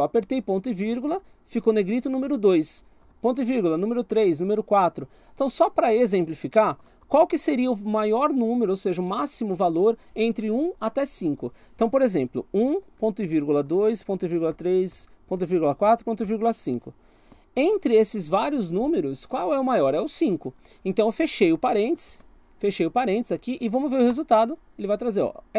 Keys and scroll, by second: 2.8 ;, 6.8 BackSpace, 12.6-17.4 typing, 21.4 BackSpace, 22.0 shift+0, 24.1 Return.